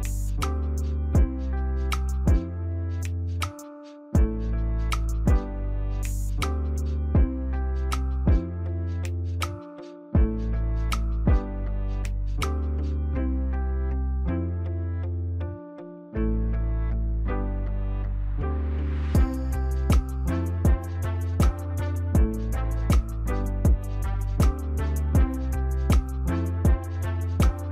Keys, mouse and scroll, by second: 17.1 right click, 22.2 Delete, 23.0 double click, 25.4 click, 27.0 click.